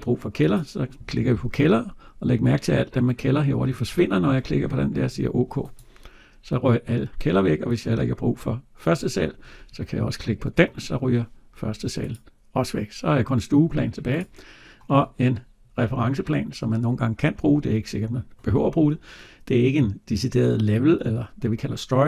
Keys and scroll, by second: 3.7 Delete, 10.4 Delete.